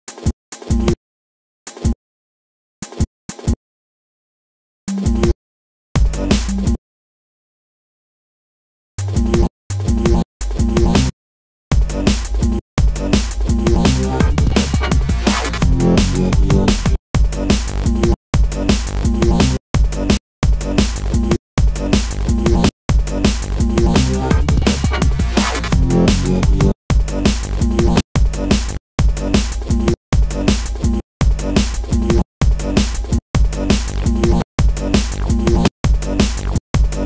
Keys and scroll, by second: 3.8 space, 15.8 space, 18.4 space, 25.6 space, 36.8 space.